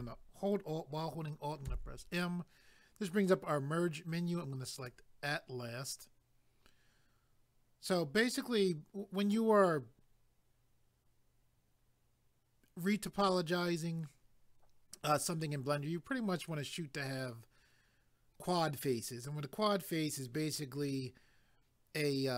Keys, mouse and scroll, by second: 1.7 alt+m, 4.8 click.